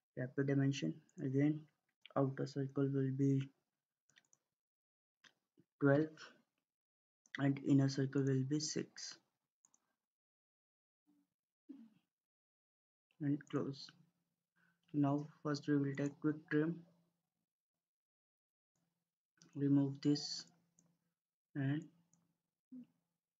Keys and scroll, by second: 5.3-6.1 typing, 11.1-11.8 typing.